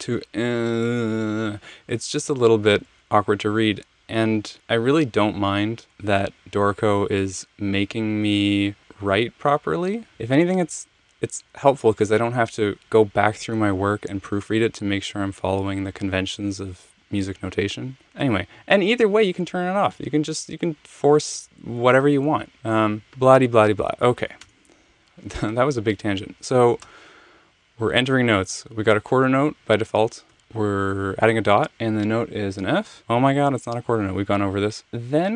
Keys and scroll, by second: 24.4 BackSpace, 26.8 Return, 33.0 f.